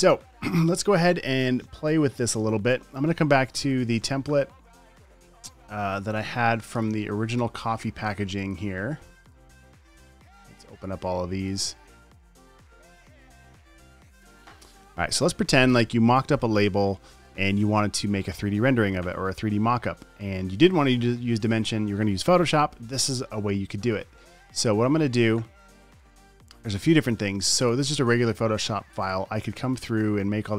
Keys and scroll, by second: 13.4 super+o.